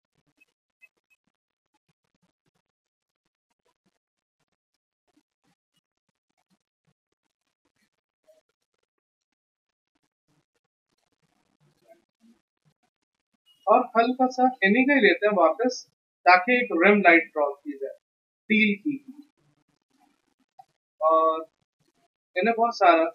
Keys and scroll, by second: 1.3 x, 7.6 x, 10.2 x, 12.4 x, 12.9 v, 20.5 b, 22.3 x.